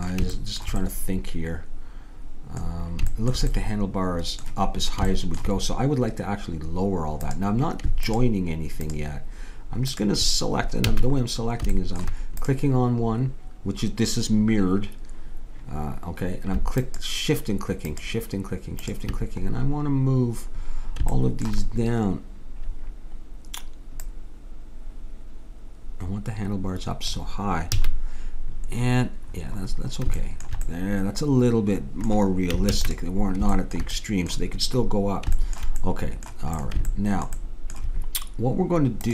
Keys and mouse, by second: 3.6-7.2 middle drag, 7.2-10.9 drag, 10.9 a, 12.4-14.1 drag, 16.8-20.6 drag, 24.0-25.8 drag, 27.8 a, 30.8-31.8 middle drag, 32.7 ctrl+s.